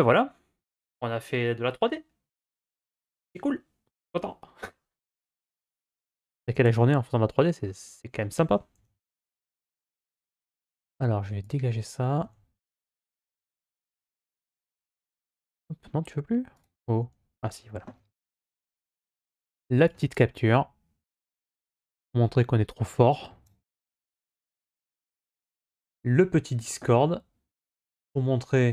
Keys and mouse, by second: 8.6 n, 9.6 n.